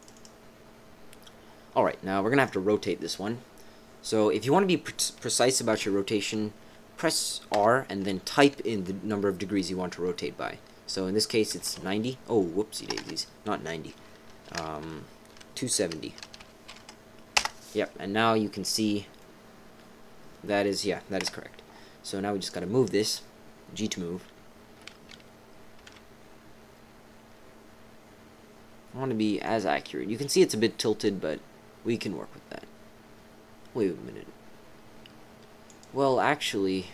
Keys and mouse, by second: 0.0 click, 2.4 click, 7.5 r, 19.2-20.3 drag, 20.3 middle click, 21.2 KP_7, 22.4 click, 25.7 g, 35.6 click.